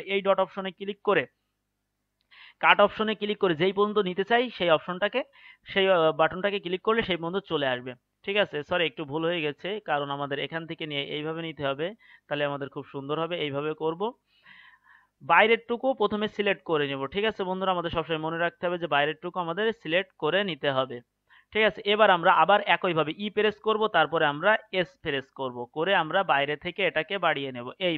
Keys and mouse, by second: 23.2 e.